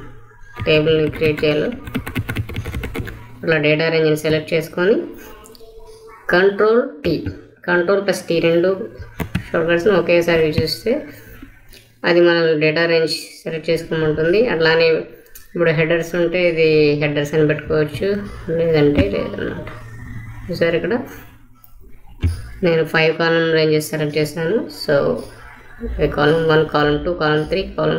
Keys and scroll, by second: 0.5 shift+Down, 8.8 ctrl+t.